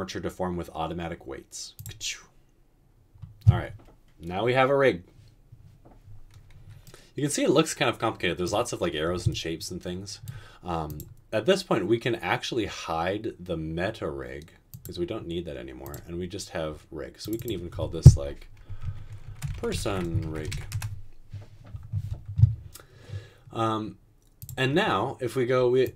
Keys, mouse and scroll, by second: 19.4-20.5 typing, 20.9 Return.